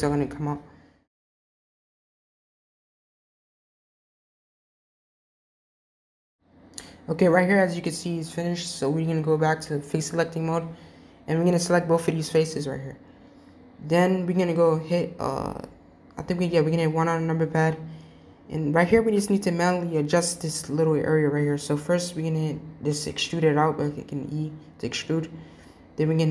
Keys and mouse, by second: 0.2 click, 0.6 g, 1.8 click, 2.3 g, 3.5 click, 3.7 g, 4.4 click, 4.6 g, 8.8 click, 12.4 shift+click, 13.5-14.6 middle drag, 16.1 KP_1, 19.1-20.0 shift+middle drag, 21.8 e.